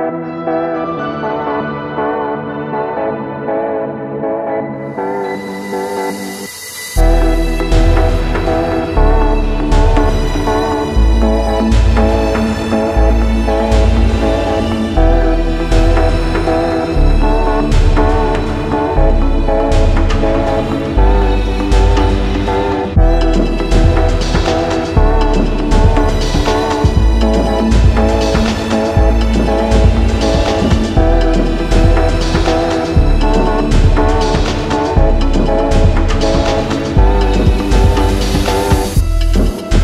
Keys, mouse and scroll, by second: 0.0-1.6 typing, 4.4-10.6 drag, 11.4-13.2 typing, 14.5 ctrl+a, 17.2-39.8 drag.